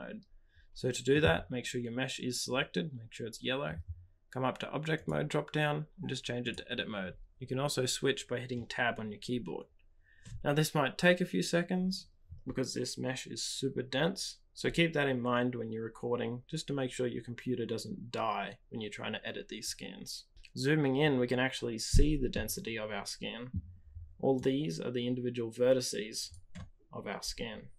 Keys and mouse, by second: 5.0-10.8 drag, 22.3 middle click, 22.9 click, 23.2 middle click, 24.4-27.6 drag.